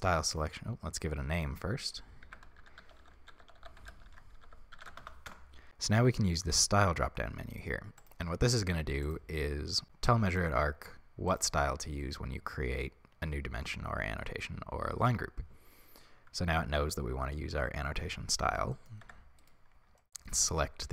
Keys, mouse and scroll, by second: 5.4 click, 5.4 n, 9.2-18.8 drag, 18.8 middle click, 19.1 Tab, 19.4 right click, 20.0-20.9 shift+middle drag.